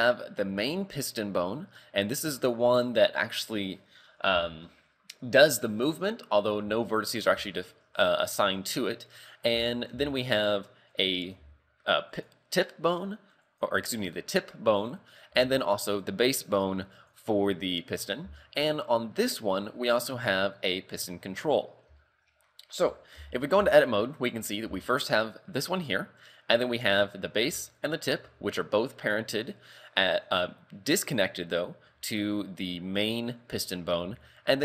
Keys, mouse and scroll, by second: 2.5 shift+middle click, 4.3 z, 7.5 shift+middle click, 10.0 z, 10.9 right click, 11.4 g, 13.5 right click, 14.7 right click, 15.3 g, 17.8 shift+middle click, 18.3 z, 19.2 right click, 19.7 scroll down 2, 21.6-22.0 scroll up 2, 22.0 shift+middle click, 23.3 Tab, 23.6 z, 24.3 right click, 24.7 g, 26.8 right click, 27.8 shift+right click, 28.2 g, 34.0 a, 34.5 right click.